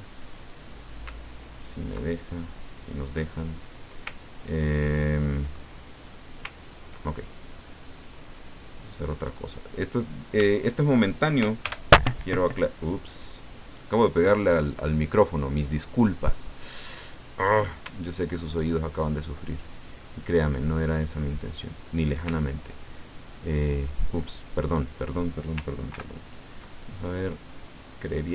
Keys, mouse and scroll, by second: 0.3 ctrl+shift+click, 2.1 ctrl+shift+click, 2.7 ctrl+shift+click, 4.2-4.7 ctrl+scroll down 2, 4.9-6.0 ctrl+middle drag, 6.0 click, 6.6 ctrl+scroll down 2, 7.6-9.7 drag, 10.5 shift+click, 11.6 ctrl+shift+g, 14.2 click, 15.7 click, 17.0 click, 18.4 shift+click, 22.6 ctrl+shift+scroll up 3, 25.9 ctrl+g, 27.8 click.